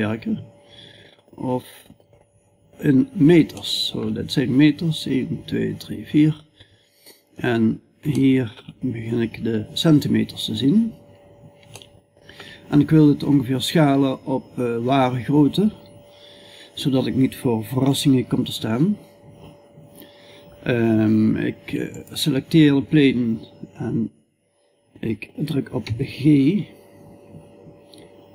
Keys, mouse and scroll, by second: 10.8 middle click, 11.5 middle click, 12.0-25.2 middle drag, 25.2 g.